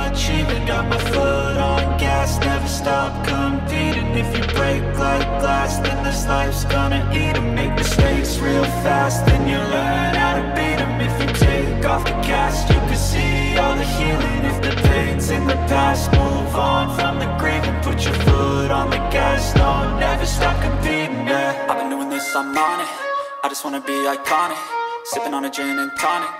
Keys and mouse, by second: 0.0 shift+middle drag, 0.6 click, 1.6 click, 2.6 KP_7, 3.5 shift+middle click, 4.5 click, 5.4 right click, 5.5 middle drag, 5.9 middle click, 6.0 click, 6.3 shift+click, 7.2 click, 7.9 click, 8.3 shift+middle click, 8.4 middle click, 8.6 middle click, 8.8-10.4 drag, 10.8 click, 12.9 click, 13.5 click, 14.1 shift+middle click, 14.6 click, 15.5-18.1 drag, 18.6 shift+middle click, 18.6 Delete, 19.2-19.5 drag, 21.0 click, 21.6 KP_0, 22.4 click, 23.0 middle drag, 25.2 shift+click, 25.7 click, 26.1-26.3 shift+drag.